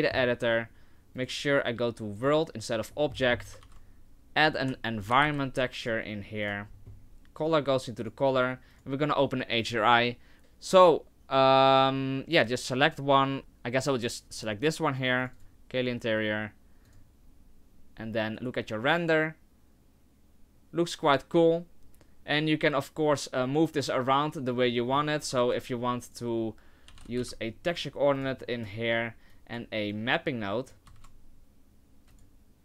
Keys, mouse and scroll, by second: 1.2 click, 2.9-3.6 scroll up 12, 3.6 shift+a, 6.7-7.4 scroll up 6, 7.5 click, 8.7 click, 16.9 click, 18.6 right click, 24.8 middle click, 25.3 click, 25.5 shift+a, 28.4 middle click, 29.8 click, 30.6 click, 31.3 click, 31.3 shift+a.